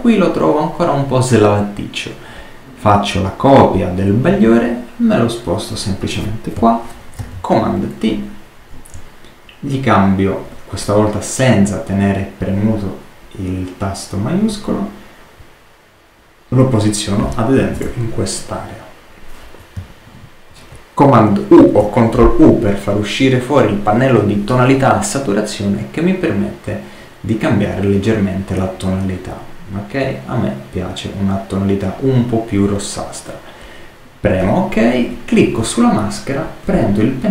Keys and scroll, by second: 7.1 super+t, 21.5 super+u.